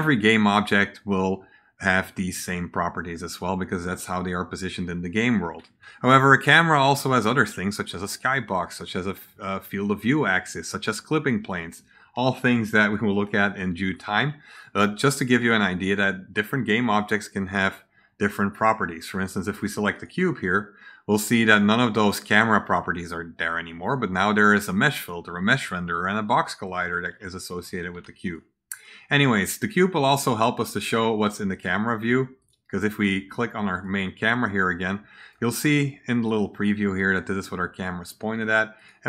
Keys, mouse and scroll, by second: 15.7 right click, 16.9 click, 19.8 click, 26.8-28.2 right drag, 27.8 a, 28.7 click, 30.5 click, 31.2-31.5 right drag, 32.3 click, 33.6 click, 34.6 right click, 38.7 click.